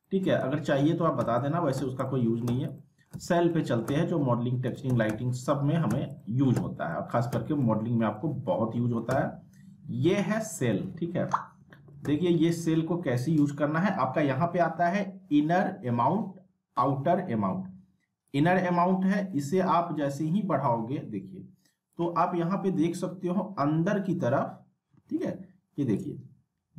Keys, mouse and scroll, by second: 0.0 middle click, 0.4-7.3 typing, 0.8 alt+middle click, 1.3 alt+middle click, 2.0-2.7 alt+middle click, 2.8 alt+middle click, 3.5 alt+middle click, 5.5 alt+middle click, 6.2 alt+middle click, 6.9 alt+middle click, 7.6 middle click, 8.1 scroll up 1, 8.2-8.7 alt+middle click, 8.7 alt+w, 9.1 z, 10.8 alt+w, 12.0 z, 18.3-22.0 drag, 22.4-22.9 scroll up 1, 25.9-26.7 drag.